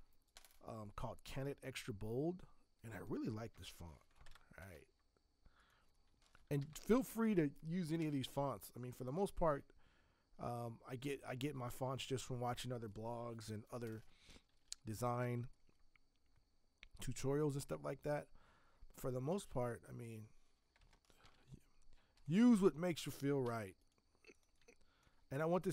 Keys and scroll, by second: 3.5 ctrl+v, 4.2 ctrl+Return, 6.1-7.3 typing, 14.4 ctrl+t, 21.2 v, 22.1 Escape, 23.4 v.